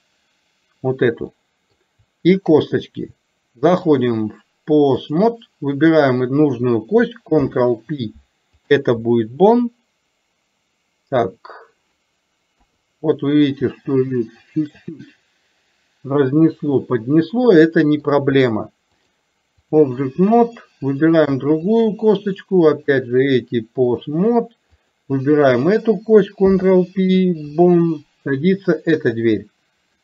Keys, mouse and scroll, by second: 1.3 middle click, 3.8-5.3 drag, 6.0 click, 12.6 KP_3, 14.0 shift+middle click, 16.8-18.1 middle drag, 19.0 click, 20.5 click, 22.8-24.2 drag, 24.8 click.